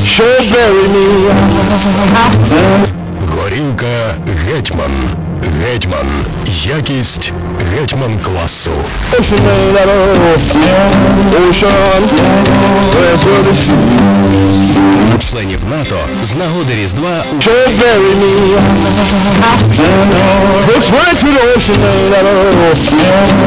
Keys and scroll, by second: 3.3 Page_Down, 15.8 Page_Down.